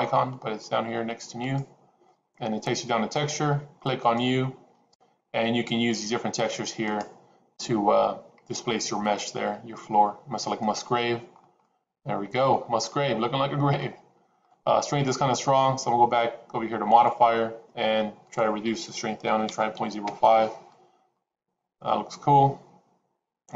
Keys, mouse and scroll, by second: 4.0 click, 6.8-11.0 drag, 11.6 middle click, 12.9-14.0 middle drag, 14.5 middle click, 16.8 click, 18.2-20.8 drag, 21.1-23.5 middle drag.